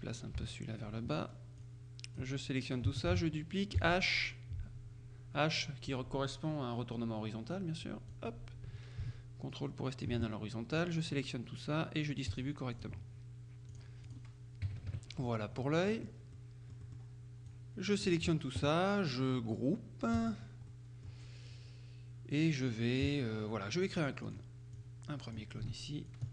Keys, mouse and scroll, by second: 0.4 Down, 1.7-2.7 drag, 3.2 ctrl+d, 8.2-10.6 drag, 12.4-13.4 drag, 13.8 click, 14.7 KP_Subtract, 15.7 middle click, 16.9 middle click, 20.2 click, 20.8 middle click, 24.4 click, 26.2-26.3 ctrl+drag.